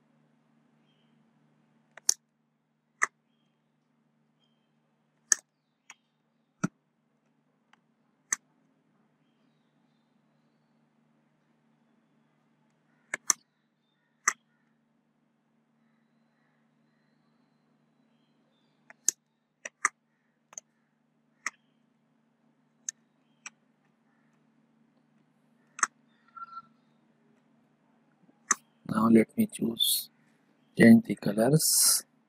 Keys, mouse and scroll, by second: 0.6 alt+click, 2.1 space, 2.2-5.4 ctrl+drag, 5.3 ctrl+space, 5.5 ctrl+click, 6.0 click, 6.9 ctrl+click, 8.2 ctrl+click, 9.3-11.2 alt+drag, 11.3 alt+click, 13.3 space, 13.4 click, 13.8 space, 13.9 ctrl+click, 14.7-19.1 alt+drag, 19.1 space, 19.2 ctrl+click, 20.5 space, 20.6-22.1 ctrl+drag, 22.1 alt+click, 23.1 ctrl+click, 23.5 click, 24.0 ctrl+click, 24.8 click, 26.8 space, 27.0-29.3 ctrl+drag.